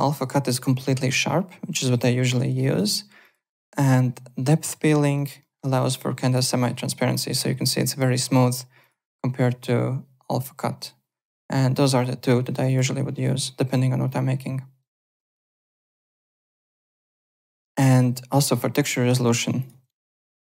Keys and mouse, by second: 0.0 alt+right click, 2.3 alt+middle click, 2.6 alt+right click, 3.2 click, 4.6 click, 5.1 alt+right click, 5.4 alt+middle click, 5.6 alt+right click, 6.0 alt+click, 6.5 alt+middle click, 6.7 alt+right click, 7.1 alt+click, 8.8 click, 10.3 click, 11.2 click, 11.9 click, 12.7 click, 14.0 click, 15.7 alt+right click, 16.4 alt+middle click, 16.6 alt+click, 17.0 alt+Tab, 17.7 alt+click, 19.2 alt+Tab, 19.6 alt+click, 20.2 alt+Tab.